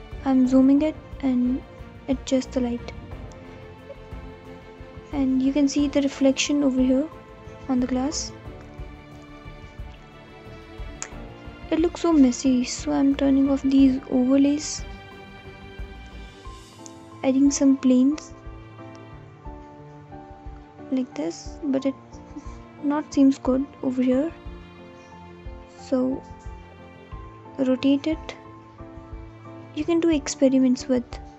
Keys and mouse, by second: 18.0 shift+r, 18.2 x, 18.8 9, 19.0 0, 22.9 g, 24.6 y, 26.0-27.1 typing, 27.4 click, 28.9 g, 29.1 x.